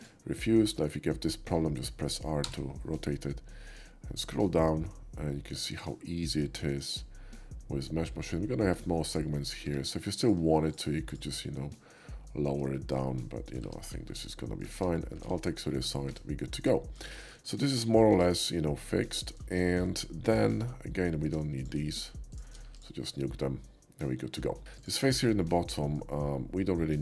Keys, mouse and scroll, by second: 2.5 r, 3.2 middle click, 3.3 middle click, 3.6 middle click, 4.3 middle click, 5.8 middle click, 6.4 middle click, 9.0 click, 9.7 Tab, 10.2 Tab, 10.2 click, 10.6 shift+click, 11.1 click, 11.5 middle click, 12.7 shift+middle click, 13.1 shift+middle click, 13.6 Tab, 14.1-14.6 middle drag, 15.6 alt+shift+x, 15.7 shift+middle click, 16.0 Tab, 16.5-17.0 middle drag, 17.1 shift+middle drag, 17.5-17.9 shift+middle drag, 18.1 Tab, 18.5 middle click, 19.6 shift+middle click, 20.0 shift+middle click, 20.5 Tab, 21.6 click, 22.6 Tab, 22.6 x, 23.2-24.3 middle drag, 24.6 shift+middle click, 24.7 shift+click, 25.3-25.9 shift+middle drag, 26.7-27.0 shift+middle drag.